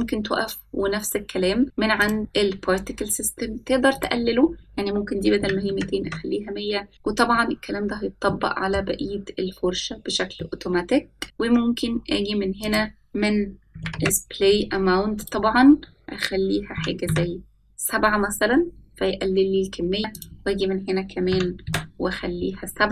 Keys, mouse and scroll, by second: 0.4 click, 2.8 click, 4.8-6.9 drag, 6.6 KP_0, 9.1-9.7 middle drag, 11.3 middle click, 13.5-14.9 drag, 16.3-18.3 drag, 21.4-22.9 drag.